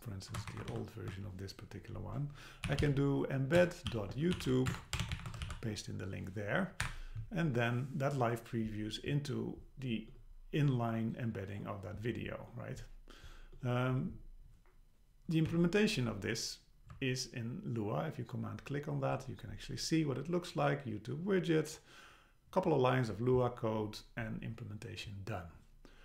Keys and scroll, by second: 0.5 shift+super+Right, 0.7 shift+Left, 3.6 Return, 5.5 super+v, 6.8 Up, 15.5 Down.